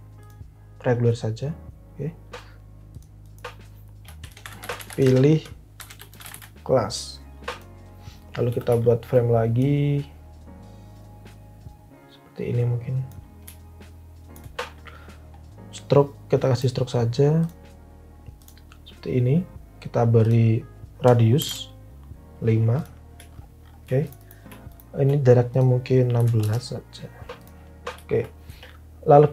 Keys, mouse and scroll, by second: 3.9-6.8 typing, 8.2-9.0 typing, 21.3 5, 21.4 Return, 25.9-26.8 typing.